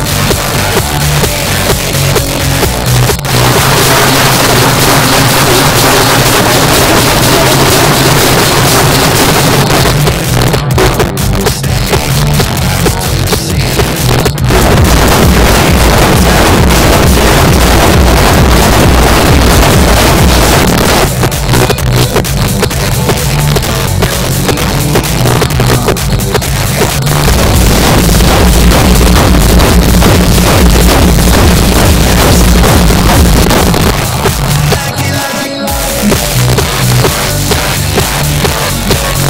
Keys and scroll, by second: 9.6 Page_Down, 20.7 Page_Down, 33.4 Page_Down.